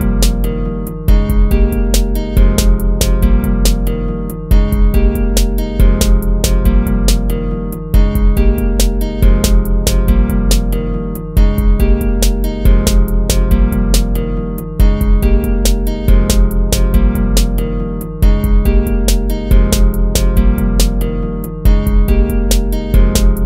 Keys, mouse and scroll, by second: 3.5 ctrl+-, 3.9 ctrl++, 6.7 ctrl+-, 7.1 ctrl++, 7.7 ctrl+z, 11.2 ctrl+-, 13.3 ctrl+z, 13.9 ctrl+-, 16.0 ctrl+z, 19.2 ctrl+z, 22.4 ctrl+-.